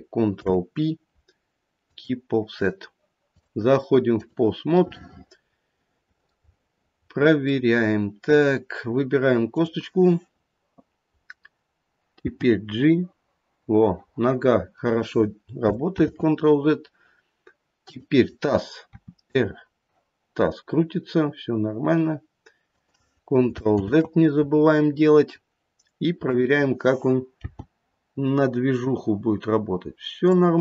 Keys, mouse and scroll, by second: 0.3 ctrl+p, 3.3 click, 4.9 middle click, 6.2 middle click, 6.4-7.5 scroll down 3, 7.5 middle click, 7.5-9.2 scroll down 2, 9.4 click, 11.1-12.2 scroll up 1, 12.2 g, 16.0 ctrl+z, 17.7 click, 18.9 r, 23.8 ctrl+z, 24.8-25.8 scroll up 1, 26.2 click, 26.2-26.7 scroll up 1, 27.3 g.